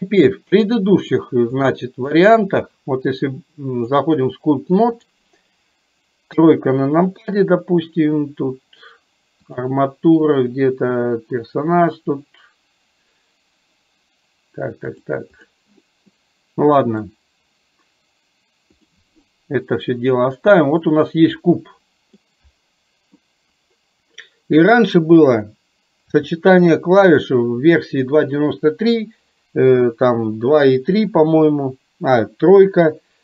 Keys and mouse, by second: 0.8 middle click, 1.6 click, 2.3 click, 4.0-5.4 drag, 16.3 middle click, 18.9 click, 20.3 middle click, 22.3-23.3 middle drag.